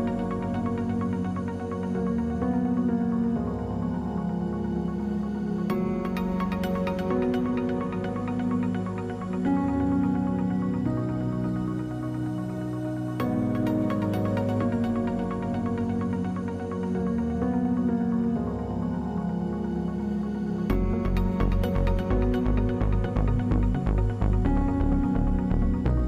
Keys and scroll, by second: 3.6 Delete, 9.6 space, 11.6 space, 23.4 space, 24.6 space.